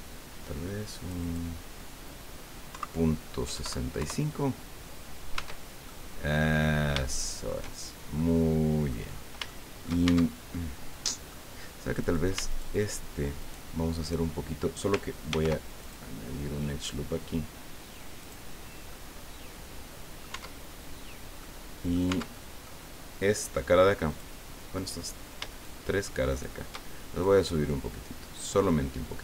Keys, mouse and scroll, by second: 2.7 KP_Decimal, 3.4 KP_6, 3.5 KP_5, 4.0 KP_Enter, 5.3 Tab, 5.8 click, 7.0 shift+click, 7.9 shift+scroll down 2, 8.1 click, 9.1 scroll up 3, 9.5 shift+middle click, 10.0 shift+Tab, 10.5 shift+middle click, 12.0 right click, 12.5 shift+right click, 13.4 shift+right click, 15.3 ctrl+r, 15.8 ctrl+click, 18.2 click, 18.9-20.3 drag, 20.3 Tab, 20.3 middle click, 20.7 scroll down 2, 21.4 click, 22.1 Tab, 22.3 click, 24.1 click, 24.7 right click, 25.5 shift+right click, 26.3 shift+right click, 27.2-28.6 middle drag.